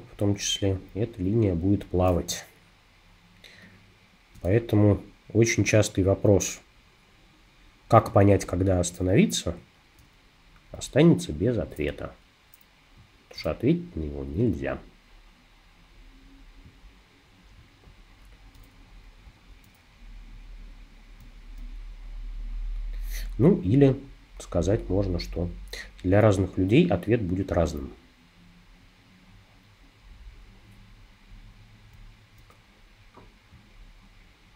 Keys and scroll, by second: 2.3 space.